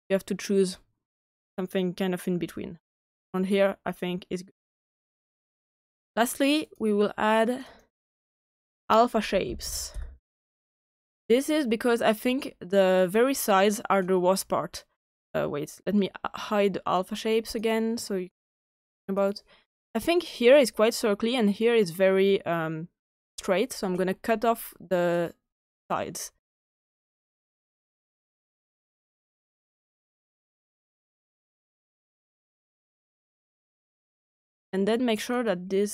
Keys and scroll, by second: 9.0-10.4 typing.